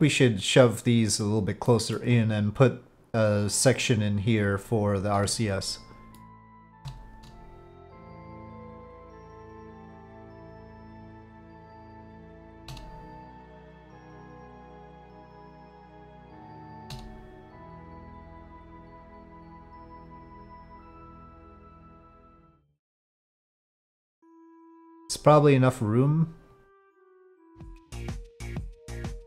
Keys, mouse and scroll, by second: 1.6 middle click, 6.2-6.7 shift+middle drag, 7.9-10.8 drag, 11.4 click, 12.1 shift+click, 13.0-14.8 drag, 16.3 shift+click, 17.2-22.1 drag, 22.3 middle click, 24.6 Tab, 26.5-27.5 drag, 27.7 e.